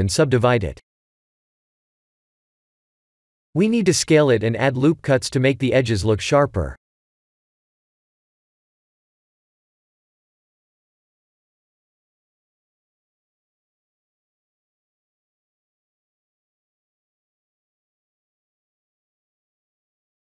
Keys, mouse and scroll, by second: 2.4 ctrl+3, 3.6 s, 5.9 middle click, 7.8 click, 8.8 click, 11.0 Tab, 11.4 KP_1, 12.5 scroll up 3, 13.3 scroll up 1, 13.4 ctrl+r, 18.9 middle click, 19.5 Tab.